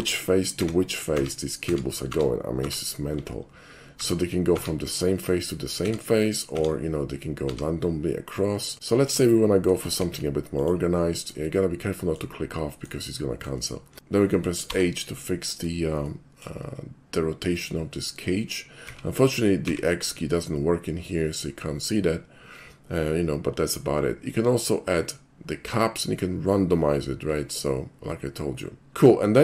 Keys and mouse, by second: 8.7 middle click, 10.0 alt+shift+c, 10.6 click, 11.6-12.2 shift+middle drag, 13.1-13.5 shift+middle drag, 13.9 alt+shift+c, 16.1-16.4 shift+middle drag, 18.9 x.